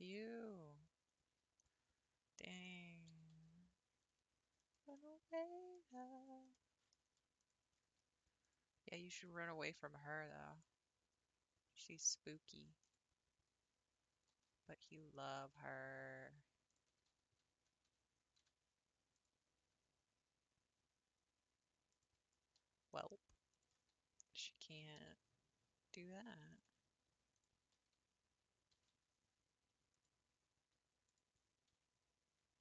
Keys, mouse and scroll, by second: 0.0 click, 1.6 click, 2.6 click, 3.1 s, 5.0-7.4 middle drag, 7.4 alt+click, 8.4 click, 9.4 scroll up 2, 10.5 r, 14.1 g, 16.7 alt+click, 17.4 g, 19.6 s, 22.9 alt+click, 23.5 alt+click, 24.4-24.8 scroll up 1, 24.9 g, 27.3 alt+click, 28.7 g, 31.0 alt+click.